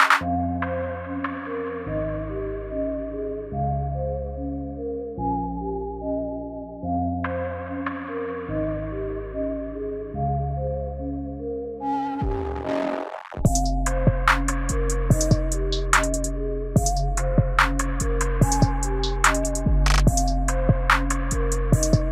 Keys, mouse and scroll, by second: 6.2 click, 8.5 space, 10.9 space, 11.6 space, 12.1 space, 14.0 click, 16.8 click, 18.8 click, 20.5 click, 21.6-22.1 scroll up 1.